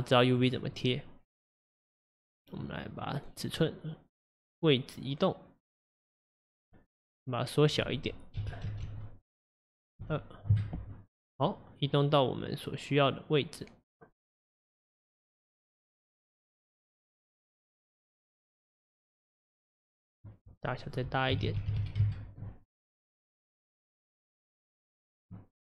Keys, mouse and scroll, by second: 4.3-10.7 drag, 11.9-25.6 drag.